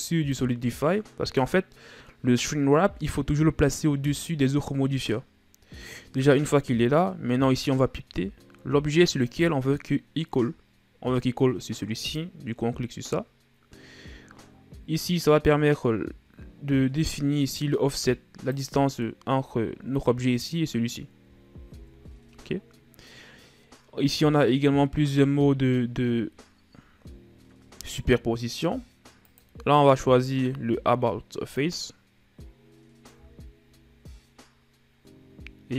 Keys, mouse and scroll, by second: 9.8-12.8 drag, 15.9-19.0 drag, 19.5-22.4 middle drag, 22.4 ctrl+z, 29.7-32.7 drag, 33.6-35.7 drag.